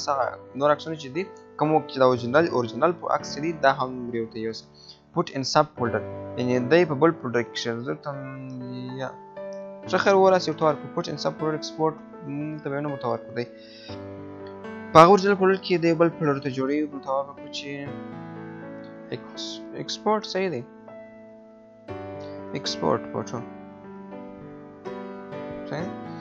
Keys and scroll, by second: 12.5 BackSpace, 20.1 BackSpace, 24.8 BackSpace.